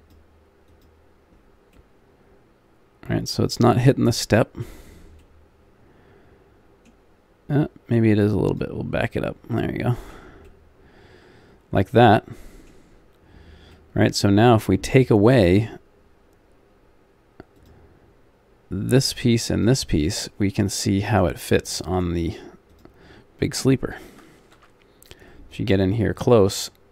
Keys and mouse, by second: 3.5 middle click, 4.9-6.8 middle drag, 8.5-9.6 drag, 9.6 middle click, 11.5 middle click, 13.8 middle click, 20.1 middle click, 20.9 middle click, 21.2 middle click, 24.5 alt+Home.